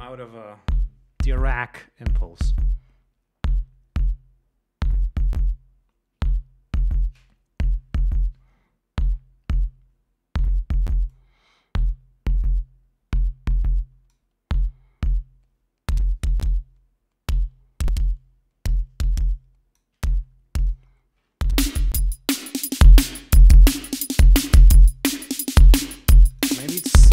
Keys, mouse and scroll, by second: 11.5-14.7 drag, 15.5-20.4 drag, 21.0-22.4 drag, 22.8-25.3 drag, 26.6 click.